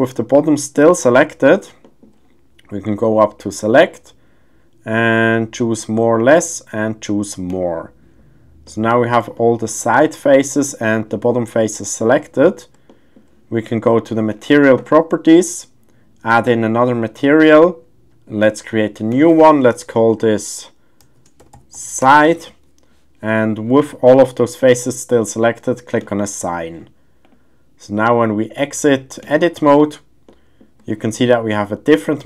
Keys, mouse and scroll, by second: 1.1 middle click, 1.8 shift+middle click, 3.4-7.7 drag, 8.7 middle click, 9.3 shift+middle click, 10.3 middle click, 11.6 middle click, 12.9 shift+middle click, 12.9 shift+scroll, 16.4 click, 18.4 click, 19.1-22.1 drag, 26.0 click, 27.2-29.4 drag, 30.3-30.6 middle drag, 30.8 shift+scroll, 30.9 shift+middle click, 31.5-31.9 middle drag, 32.1 shift+middle click.